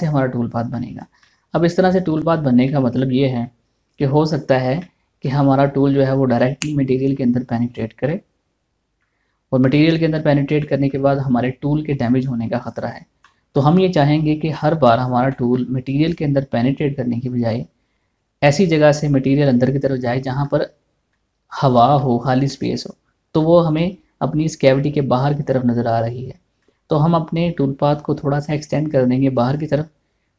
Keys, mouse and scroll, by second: 0.7-1.2 scroll up 1, 1.3 shift+middle click, 8.7 middle click, 13.2 scroll down 1, 13.8-15.9 middle drag, 16.5 scroll up 1, 21.1-27.2 middle drag, 27.2 middle click.